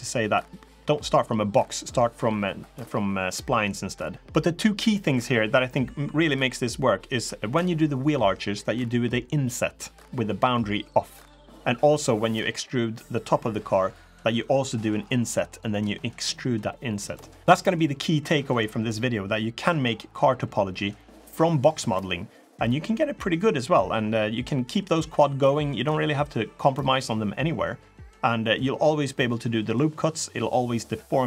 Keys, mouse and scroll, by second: 12.9 middle click, 12.9 shift+click, 12.9 3, 12.9 middle click, 15.8 middle click, 16.5 middle click, 16.8 e.